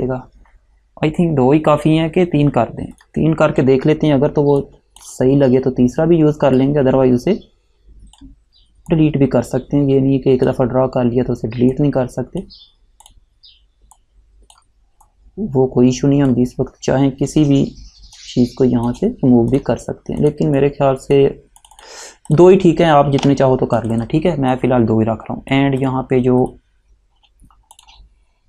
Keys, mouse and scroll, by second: 0.0 click, 3.1 click, 6.7 click, 18.3 shift+click, 19.6 click, 23.3 Delete, 23.9 click, 27.9 click.